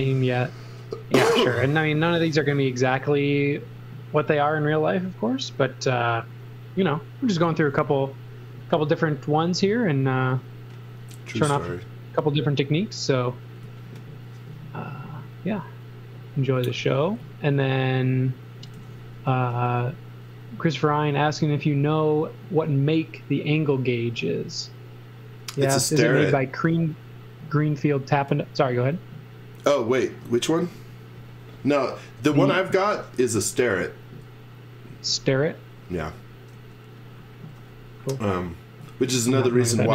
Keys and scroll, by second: 7.5 z, 13.6 z, 16.8 x, 18.8 z, 19.3 x, 34.9 z, 36.6 e.